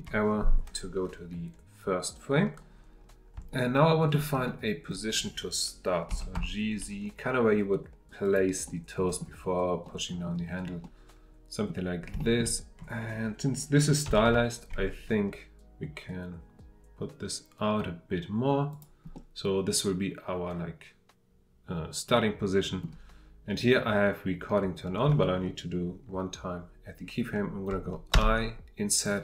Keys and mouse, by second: 3.5-4.1 shift+middle drag, 4.4-4.9 middle drag, 6.1 g, 6.3 z, 8.2 click, 8.7-9.2 middle drag, 9.8-10.2 drag, 10.8-11.6 drag, 12.2 shift+middle click, 14.1 g, 14.3 z, 18.7 click, 19.2-22.8 middle drag.